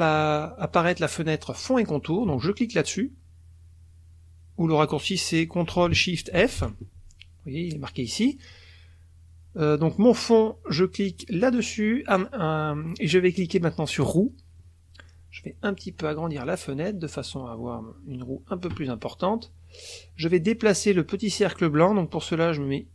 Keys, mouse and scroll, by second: 1.6 click, 6.4 ctrl+shift+f, 9.9 click, 11.4 click, 14.0 click, 15.8-17.1 drag.